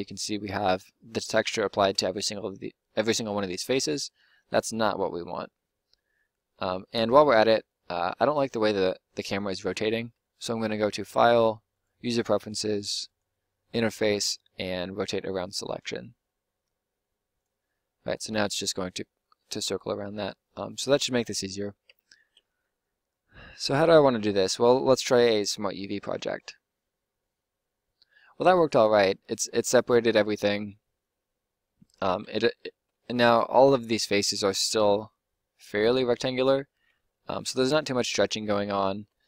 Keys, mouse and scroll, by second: 1.8 Tab, 2.9 Tab, 3.7 Tab, 10.5-17.9 middle drag, 21.8 u, 32.1 Tab, 32.7 Tab, 36.3 Tab, 36.7 Tab, 37.5 Tab, 38.9 Tab.